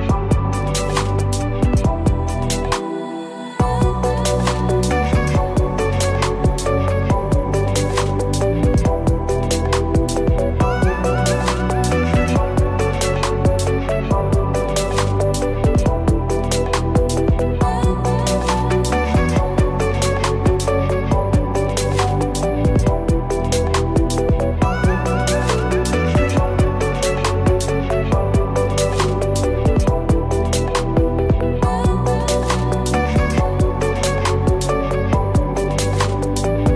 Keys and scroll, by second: 12.3 ctrl+z, 26.7 ctrl+Return, 27.3 ctrl+d.